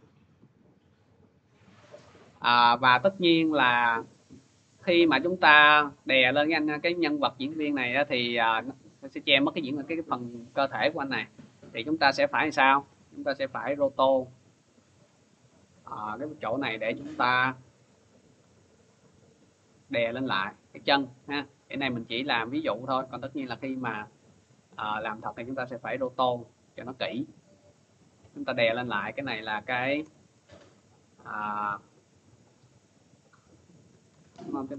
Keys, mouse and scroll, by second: 0.3 click, 1.8 click, 5.3 click, 7.8 middle click, 8.7-10.3 scroll, 12.0 click, 12.7 ctrl+d, 14.0 click, 16.4 click, 17.6 click, 18.3 click, 19.0 click, 19.6 click, 20.3 click, 20.9 click, 21.6 click, 22.2 click, 22.8 click, 23.3-23.8 scroll, 23.8 click, 24.4 click, 25.0 click, 25.5 click, 26.1 click, 27.2 click, 29.3 click, 29.8 Return, 33.5-34.6 typing.